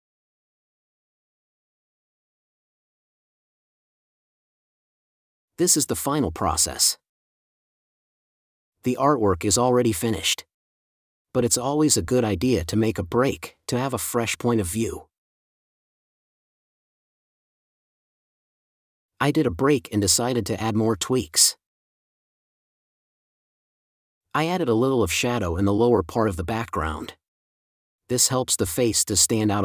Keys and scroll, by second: 3.5 space, 4.0 super+space, 6.1 super+z, 12.0 space, 13.4 space, 21.7 space, 23.4 5, 25.6 space, 27.7 super+s, 28.7 shift+super+s.